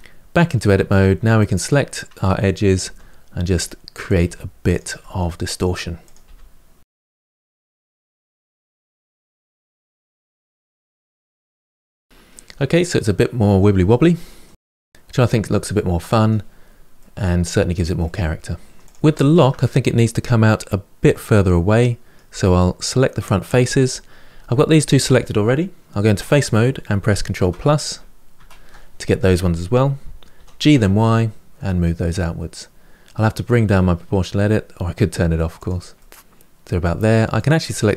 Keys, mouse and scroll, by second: 0.2 middle click, 1.2 click, 1.7 middle click, 2.6 g, 3.8 click, 3.9-11.6 typing, 4.0 middle click, 4.7 click, 4.9 middle click, 5.3 middle click, 5.7 middle click, 5.8 click, 6.0 middle click, 6.4 middle click, 6.5 click, 6.7 middle click, 6.8 click, 7.0 middle click, 7.1 click, 7.3 middle click, 7.5 click, 8.0 click, 8.2 middle click, 8.7 click, 9.3 click, 9.6 middle click, 9.9 middle click, 10.2 click, 10.4 middle click, 10.7 click, 10.8 middle click, 11.5 click, 11.7 middle click, 12.0 scroll down 1, 12.1-14.4 middle drag, 14.4-15.0 scroll up 1, 15.0 click, 15.4 g, 16.5-18.6 middle drag, 18.6 scroll down 2, 18.8 click, 19.0-22.1 shift+middle drag, 22.1 Tab, 22.4-25.4 middle drag, 25.9 3, 27.2 ctrl+KP_Add, 27.6 ctrl+KP_Add, 28.2 ctrl+KP_Add, 30.1 g, 35.8-37.2 middle drag, 37.2 click, 37.6 shift+click.